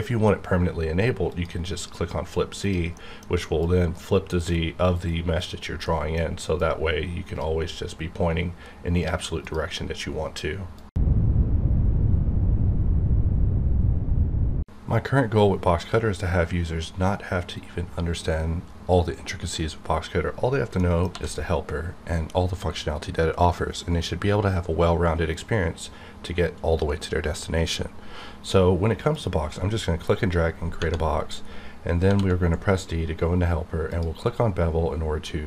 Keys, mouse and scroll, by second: 1.3 click, 2.9 middle click, 3.6-5.4 drag, 5.8 middle click, 6.6-9.4 drag, 21.1 d, 29.0 d, 29.1-30.8 drag, 31.4-32.0 scroll up 1, 32.0 d, 33.9 click.